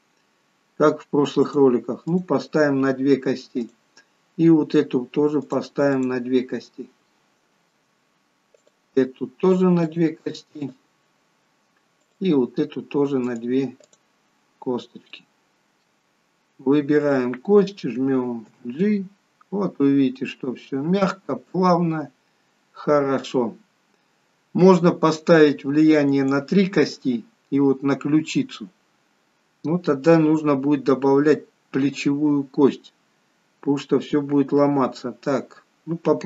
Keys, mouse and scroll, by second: 0.2 click, 2.2 click, 3.7 click, 6.0 click, 7.1 shift+middle click, 8.7 click, 10.0 click, 12.1 click, 13.3 click, 15.2 click, 15.2 shift+middle click, 17.1 click, 18.7 g.